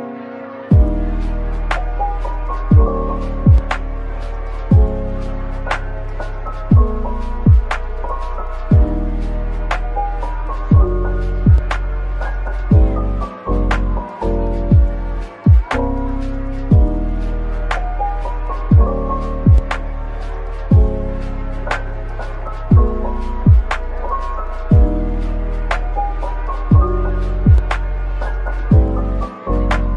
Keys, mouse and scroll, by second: 3.1-5.5 typing, 9.4-9.8 scroll down 1, 10.1-10.7 typing, 10.2 shift+right click, 13.2 typing, 14.7-15.6 typing, 17.2-19.2 typing, 20.5-20.9 scroll up 1, 21.3-22.0 typing, 23.8 middle click, 24.9 Tab, 25.7 ctrl+r, 26.4-27.4 scroll up 1, 27.4 double click, 28.3 typing.